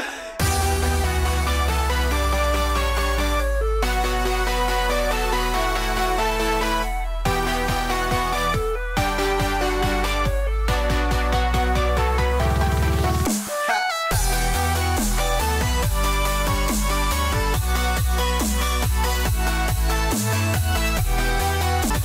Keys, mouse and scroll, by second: 0.2 click, 2.2 click, 5.8 click, 11.1 click, 12.3 click, 18.3 click, 19.6 click.